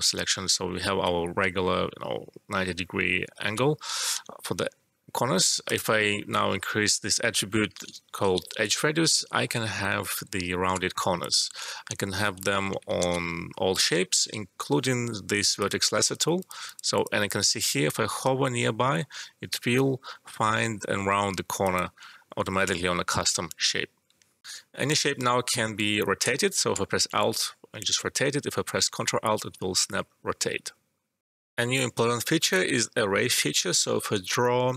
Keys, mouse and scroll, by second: 3.3 ctrl+z, 4.1 e, 5.6 click, 8.3 typing, 8.7 Return, 9.3 alt+middle click, 9.8 click, 10.3 space, 11.9 e, 12.5 alt+middle click, 13.0 ctrl+z, 13.9 e, 15.5 click, 16.2 click, 16.4 click, 21.6 click, 24.4 alt+F12, 26.0 click, 26.2 space, 31.2 alt+F12, 33.5 click.